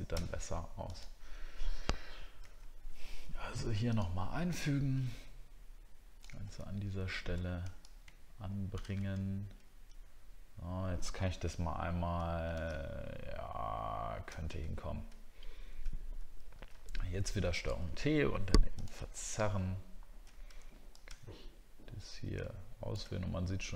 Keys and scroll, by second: 6.5 alt+scroll up 1, 9.3-10.2 alt+scroll down 1, 14.6 alt+scroll down 1, 19.2 alt+scroll up 1, 20.0 alt+scroll up 1.